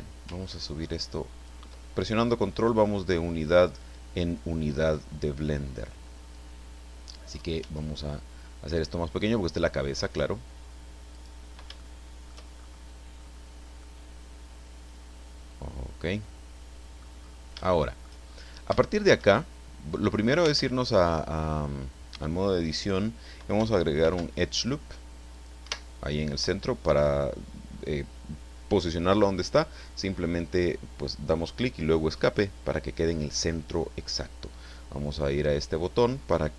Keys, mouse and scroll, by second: 0.4-1.6 ctrl+drag, 7.6 s, 11.1 click, 11.8-12.4 shift+middle drag, 12.6-13.1 shift+scroll up 3, 13.1-13.4 scroll down 2, 13.8-17.2 middle drag, 17.2-17.7 scroll up 1, 17.7-18.2 shift+middle drag, 18.8-19.4 shift+middle drag, 19.6 shift+middle click, 20.4 Tab, 24.0 ctrl+r, 25.3 click, 25.6 Escape.